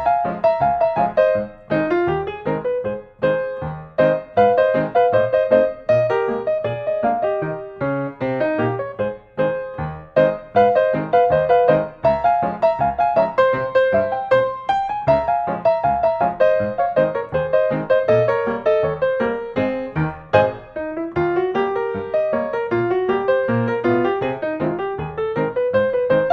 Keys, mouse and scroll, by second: 0.0 scroll down 1, 0.2-1.3 drag, 2.7-3.9 drag, 4.9-5.9 drag, 7.9 click, 9.2-9.7 scroll, 11.2 click, 15.6 click, 16.0-16.4 scroll, 23.1 scroll, 23.9 click, 24.5 middle click, 24.9 right click, 25.9 click.